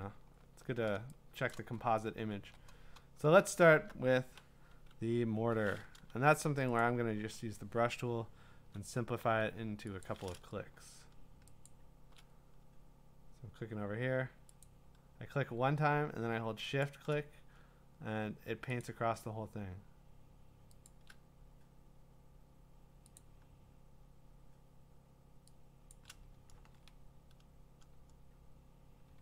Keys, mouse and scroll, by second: 0.3 scroll, 1.5 click, 1.8-2.4 alt+scroll, 3.3-3.8 scroll, 6.8 click, 7.2 b, 8.6 [, 9.2 [, 10.0 click, 11.7 shift+click, 14.6 click, 16.8 shift+click, 18.8 click, 20.9 shift+click, 23.2 click, 25.0 click, 25.9 shift+click, 26.6 ctrl+z.